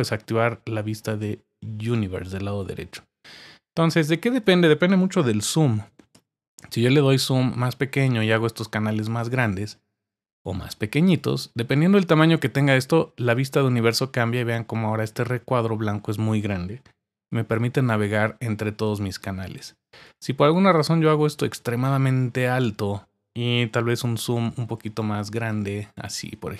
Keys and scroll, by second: 5.5-6.6 typing, 17.3 typing, 23.9-26.0 typing.